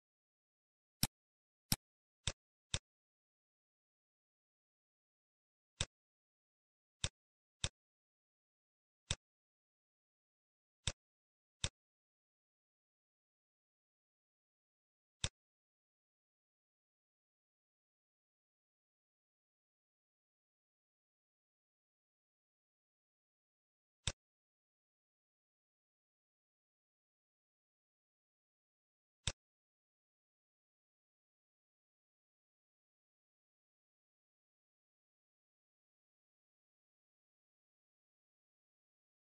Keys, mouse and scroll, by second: 0.2 scroll down 2, 0.4 middle click, 1.0 click, 1.0 scroll up 1, 1.6 click, 2.2 click, 2.7 click, 4.6 shift+d, 6.5-7.0 scroll up 3, 7.0 click, 9.1-9.6 scroll up 3, 15.2 shift+click, 17.9 scroll down 6, 18.4 middle click, 19.0 scroll up 2, 19.5-21.0 scroll down 3, 21.0-22.2 scroll up 5, 24.0 click, 27.0 scroll down 6, 28.1-28.6 scroll down 1, 28.6 middle click, 29.4 click, 30.6-31.2 scroll up 6, 31.7 scroll up 1, 34.2 scroll down 1.